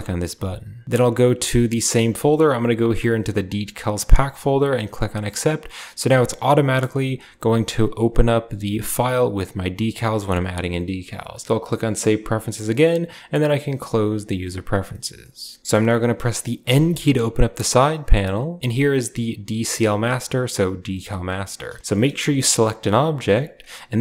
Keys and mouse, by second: 14.7-15.0 drag, 15.6 click, 16.5 n, 18.0 click, 21.8 click, 22.9 g.